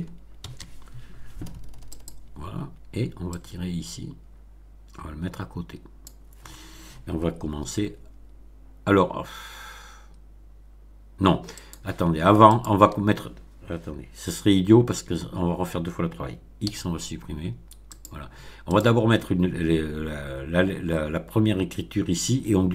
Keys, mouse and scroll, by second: 0.3 shift+d, 1.8 click, 3.3-6.1 drag, 7.4 a, 11.5 click, 12.4 shift+click, 16.6 x, 17.9 click, 18.6 click.